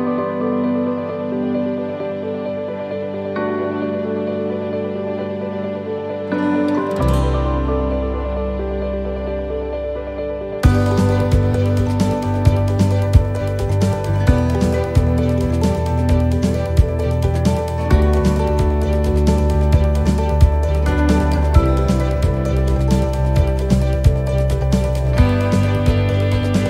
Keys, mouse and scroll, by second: 1.7 shift+middle click, 2.4 ctrl+r, 4.5 ctrl+r, 6.8 ctrl+r, 10.2 ctrl+r, 13.1 shift+middle click, 13.9 ctrl+r, 16.2-20.9 alt+shift+right click, 20.9 shift+middle click, 21.9 alt+shift+right click, 23.7 shift+middle click, 23.7 alt+shift+right click, 24.5 alt+shift+right click.